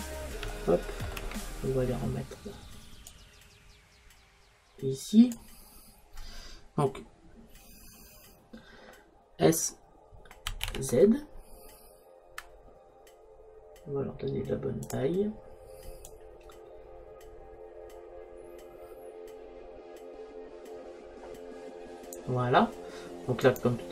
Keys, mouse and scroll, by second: 3.1-4.8 drag, 10.5 s, 16.1 click, 23.6-23.9 right drag.